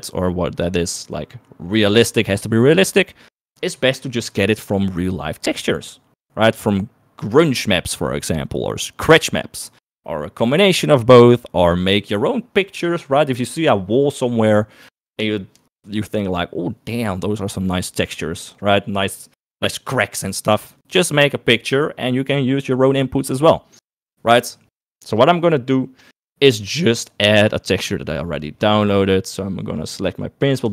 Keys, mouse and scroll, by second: 26.0 click.